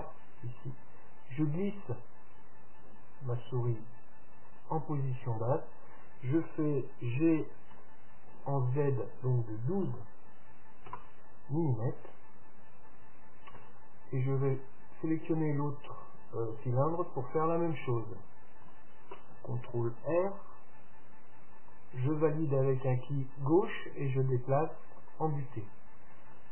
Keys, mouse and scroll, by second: 7.3 g, 13.8 Tab, 14.4-16.4 right drag, 17.4 Tab, 18.8 a, 20.3 ctrl+r.